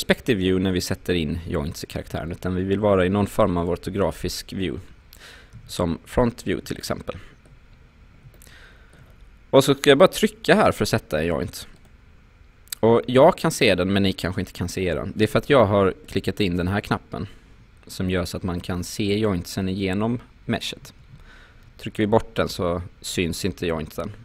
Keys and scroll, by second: 2.1 space, 5.6 space.